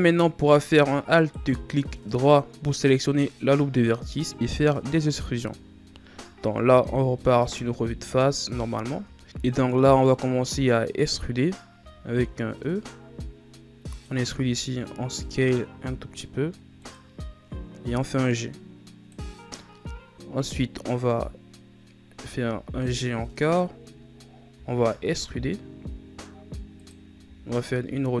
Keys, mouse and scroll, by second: 1.0 alt+right click, 4.9 KP_1, 6.1 scroll down 4, 7.0-8.0 scroll up 13, 8.8 scroll up 3, 9.2 KP_1, 11.7 e, 18.0-21.0 drag, 22.1 g, 24.4 e, 27.2 r.